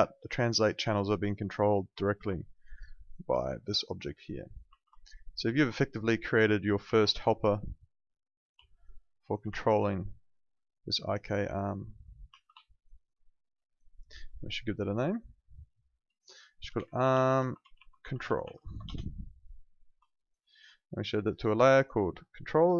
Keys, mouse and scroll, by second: 1.4 click, 2.3 alt+click, 2.6 alt+right click, 3.0 alt+click, 4.8 z, 4.9 alt+click, 5.2 alt+right click, 5.4 alt+middle click, 6.2 click, 6.8 ctrl+z, 7.5 click, 8.6 alt+click, 8.9 alt+right click, 9.1 alt+click, 9.5 ctrl+z, 10.1 click, 12.6 alt+click, 12.9 alt+right click, 13.1 alt+middle click, 13.3 alt+right click, 13.6 alt+click, 14.0 alt+middle click, 15.0 click, 16.6-19.0 typing, 20.1 alt+click, 20.4 alt+middle click, 21.7 click.